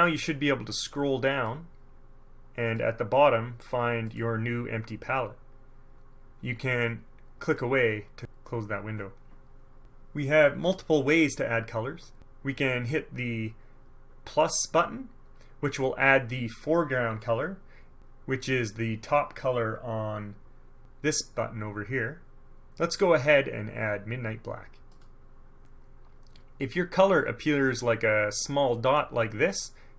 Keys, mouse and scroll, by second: 1.6-3.1 drag, 4.2 click, 7.6 click, 25.1 click.